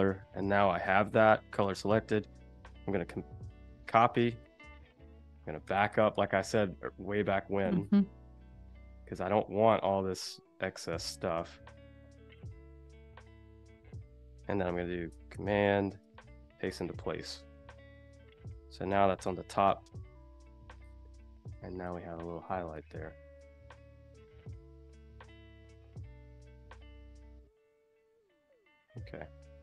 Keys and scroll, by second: 2.4 super+c, 4.5 super+c, 5.4 super+z, 9.6 super+z, 11.2 BackSpace, 12.3 shift+super+z, 13.7 super+z, 15.9 super+f, 17.8 super+-, 19.2 super+g, 19.6 i, 21.2 a, 22.5 space, 24.6 z, 25.3 a, 29.3 super+-.